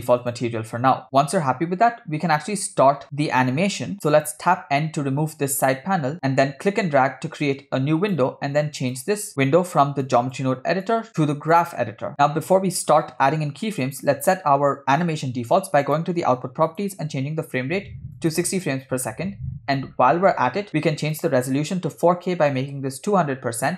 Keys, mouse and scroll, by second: 5.3 n, 6.7-8.2 drag, 8.9 click, 10.1 click, 10.8-11.8 drag, 12.4-13.0 scroll down 1, 13.0 scroll down 2, 13.0 middle click, 15.9 click, 16.7-18.4 drag, 19.2 scroll up 2, 19.9-20.3 scroll down 2, 20.3-21.1 scroll up 2, 21.2-22.7 drag, 22.6 0.